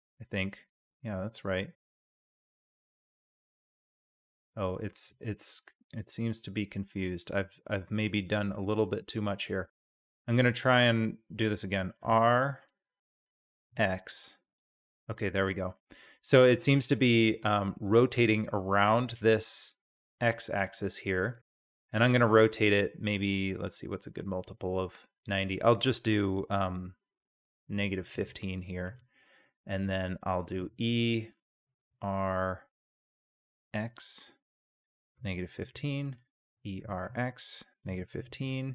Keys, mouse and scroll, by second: 7.3 middle click, 8.1 g, 9.4-9.8 middle drag, 9.8 click, 10.7 click, 12.0 r, 30.5 e, 36.5 e.